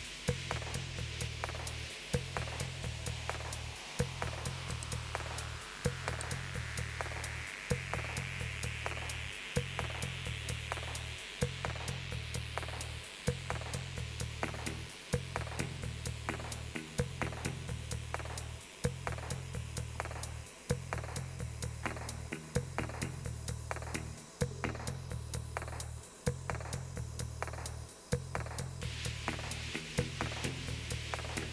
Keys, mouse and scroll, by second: 4.7 click, 6.1 click.